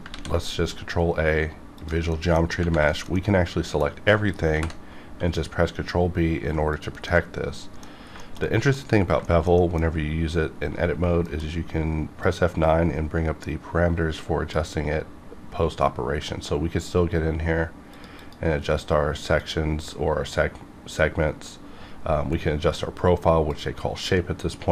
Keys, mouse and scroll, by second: 0.1 ctrl+a, 1.8 click, 2.1 middle click, 2.4 scroll up 1, 2.9-4.5 shift+middle drag, 4.5 ctrl+b, 6.7 click, 6.7 click, 7.1 middle click, 8.2 shift+middle click, 8.5 shift+middle click, 8.9 scroll up 2, 9.2 shift+middle click, 9.8 scroll up 1, 11.2 F9, 12.2-16.9 drag, 17.9 click, 18.2 click, 19.4 click, 23.5-24.7 drag.